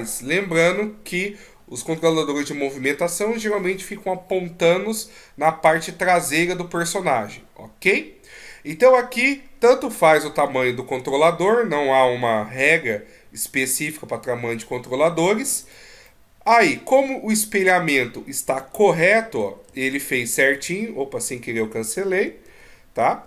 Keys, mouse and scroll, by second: 11.7-12.1 scroll down 1, 12.7 scroll down 6, 13.4-14.1 scroll down 1, 14.1-14.9 scroll up 8, 15.6 right click, 16.1 middle click, 17.4-18.0 scroll down 2, 17.9 scroll up 1, 18.7 ctrl+z, 19.1 middle click, 19.6 ctrl+z, 20.6 e.